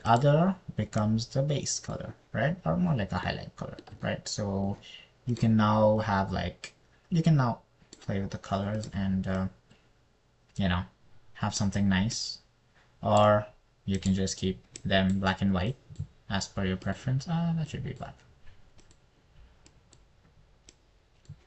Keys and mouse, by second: 6.7 click, 15.4 click, 18.3 click.